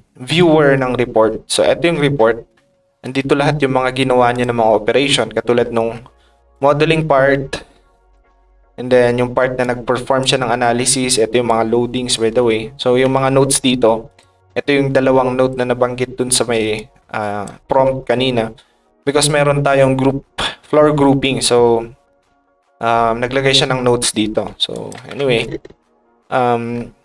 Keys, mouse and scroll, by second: 4.3 click, 4.6 click, 6.5-8.1 drag, 8.3 middle click, 9.6 click, 9.6 right click, 10.6 click, 11.4 click, 14.1 ctrl+click, 14.9 ctrl+click, 16.7 ctrl+click, 17.0 ctrl+right click, 24.7 ctrl+shift+click, 26.7 middle click.